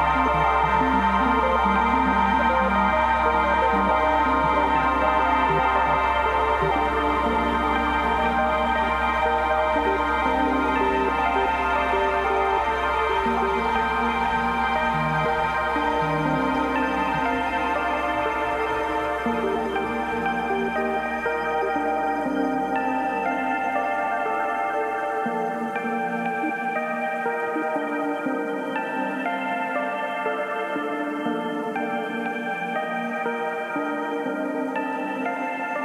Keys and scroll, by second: 7.1 space, 13.0 b, 13.3 2, 14.0 ], 16.4 [, 17.9 [, 19.6 [, 22.4 space, 34.6 v.